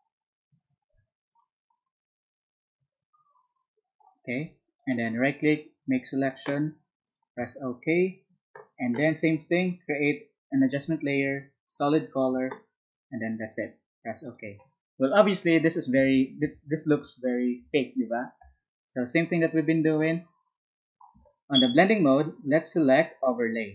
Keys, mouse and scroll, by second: 1.6-4.0 alt+drag, 4.8 alt+right click, 5.8 alt+click, 7.1 alt+click, 9.8 alt+click, 21.4 space.